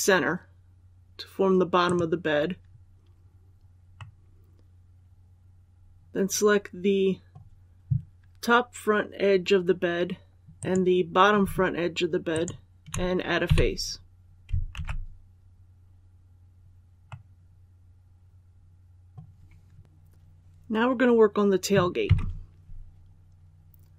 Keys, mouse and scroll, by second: 1.7 click, 3.8-7.3 middle drag, 10.4 right click, 12.2 shift+right click, 13.3 shift+f, 14.6 alt+a, 16.9-19.3 middle drag, 19.8 click, 21.9 KP_1.